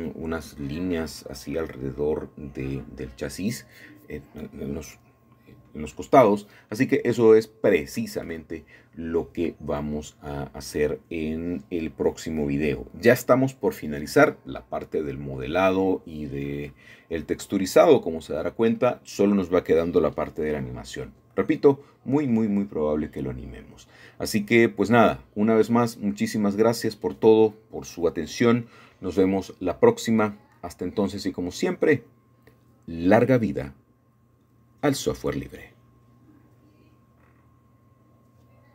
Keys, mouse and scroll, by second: 2.2 middle click, 5.1-6.0 middle drag, 6.7-8.2 drag, 8.2 Return, 14.8 middle click, 16.4-17.5 drag, 18.4 KP_2, 18.6 Return, 21.2-22.3 drag, 22.6 ., 22.7 KP_2, 22.9 Return, 25.9-28.6 scroll down 1, 26.4-29.3 middle drag, 30.9-32.5 middle drag, 31.4-32.4 scroll down 1, 32.4 scroll down 1, 33.8-34.8 shift+middle drag, 37.6 ctrl+s.